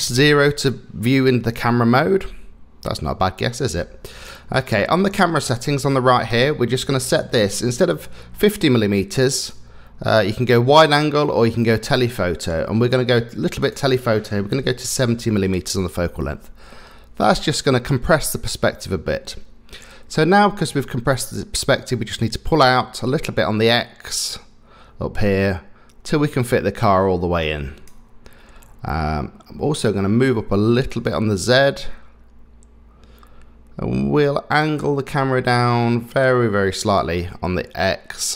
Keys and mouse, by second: 0.1 KP_0, 9.6-12.9 drag, 13.6-15.1 drag, 22.3-28.0 drag, 31.0-34.6 drag, 37.2-38.3 drag.